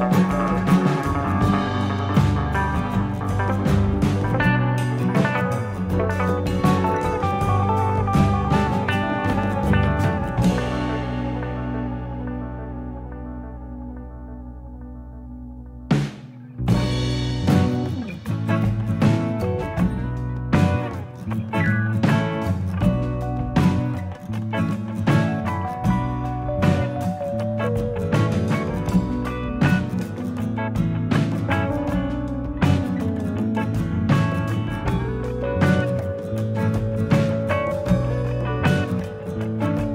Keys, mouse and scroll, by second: 0.6-1.3 scroll up 6, 1.7 click, 2.0 middle click, 2.6 shift+click, 2.9 middle click, 4.7 alt+click, 5.2 scroll down 2, 5.4 middle click, 7.3 l, 7.6 middle click, 8.5 middle click, 10.4 KP_3, 12.0 click, 13.2 click, 15.8 middle click, 17.0 click, 17.4 middle click, 19.8 click, 21.4 middle click, 22.6 middle click, 23.2 click, 24.0 shift+click, 25.2 m, 26.5 middle click, 28.4 shift+middle click, 29.0-29.9 scroll down 2, 30.2 ctrl+r, 34.1-34.4 scroll up 3, 34.6 click, 35.4 shift+click, 36.3 m, 39.3 ctrl+r.